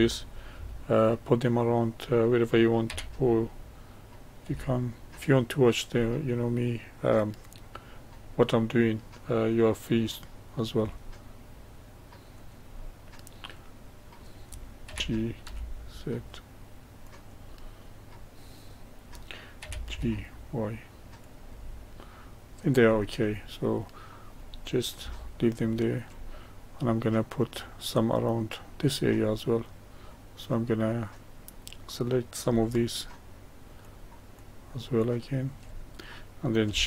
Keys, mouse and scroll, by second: 2.9 g, 6.0-9.1 middle drag, 10.7 s, 12.7-14.9 middle drag, 14.9 g, 17.6-19.6 middle drag, 19.6 g, 21.6-22.9 middle drag, 22.9-23.6 scroll down 3, 23.6-31.0 middle drag, 31.0 click, 32.7 shift+click, 33.8 shift+click, 34.3 shift+click, 35.0 shift+click, 35.7-36.8 middle drag.